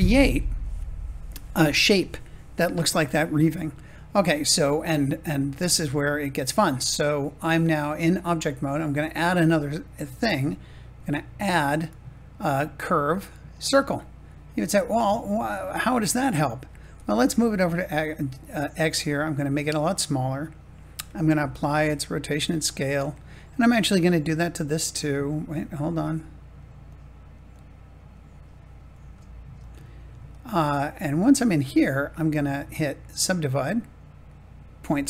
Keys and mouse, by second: 9.6 click, 11.3-14.4 drag, 16.6 g, 16.9 x, 18.3 click, 19.0 s, 20.2 click, 21.3 ctrl+a, 28.9 ctrl+a, 31.3 Tab.